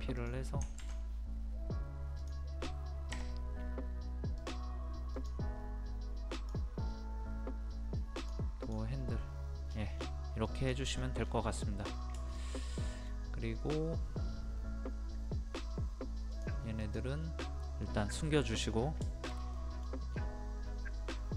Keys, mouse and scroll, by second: 0.2 click, 2.2 click, 3.1 KP_2, 4.4 click, 9.6 scroll down 1, 9.7 scroll up 1, 9.9-10.4 scroll down 1, 10.4 click, 10.9 scroll down 1, 11.5 middle click, 11.9 scroll down 1, 12.2-13.9 shift+middle drag, 16.3 click, 17.4 middle click, 18.6 scroll up 1, 19.0 middle click, 19.3 scroll down 1, 19.5 middle click, 20.1 scroll up 1.